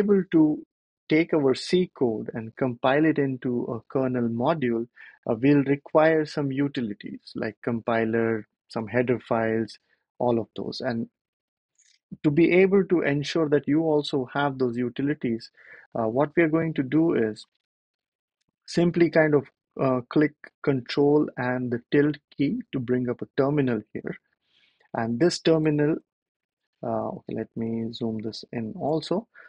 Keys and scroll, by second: 22.1 ctrl+`, 25.9 super+=, 26.0 super+=, 26.2 super+=, 27.4 shift+super+=, 27.6 shift+super+=.